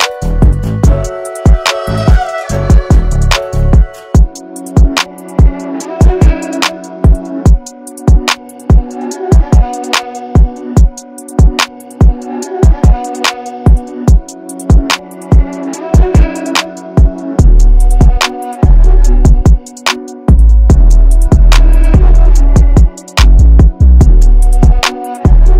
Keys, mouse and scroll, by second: 0.7 x, 1.8 click, 4.3 alt+scroll down 1, 5.1 space, 5.2 click, 6.5 shift+x, 7.0 click, 9.4 alt+scroll up 1, 9.7 space, 9.8 click, 10.4 alt+scroll up 1, 10.8 space, 11.0-14.7 drag, 16.2 ctrl+z, 16.6 click, 19.3 ctrl+g, 21.7 ctrl+click.